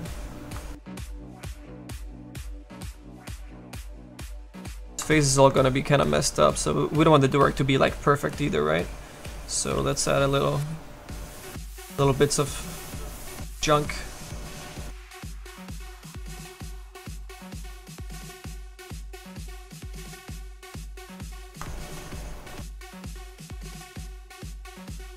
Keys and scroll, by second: 7.2 s, 9.7 s, 11.8 s, 18.9 s, 23.3 s.